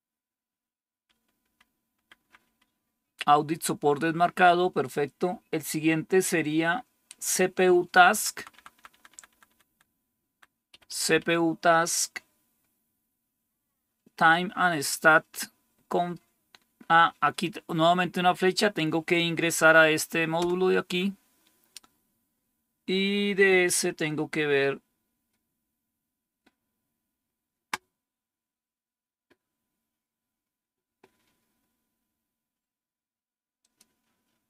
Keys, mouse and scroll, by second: 1.0 Up, 1.3 Up, 1.9-2.3 Up, 8.0 Down, 8.2 Down, 8.4 Down, 8.6 Down, 8.8 Down, 9.0 Down, 9.2 Down, 9.5 Down, 10.2 Down, 10.6 Up, 10.8 Up, 11.0 Up, 20.3 Return.